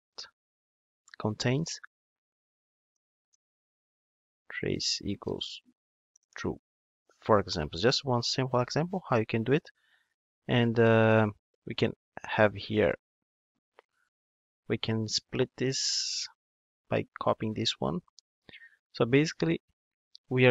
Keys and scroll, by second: 7.5 alt+super+l, 9.8 Tab, 17.9 super+c, 18.4 super+v.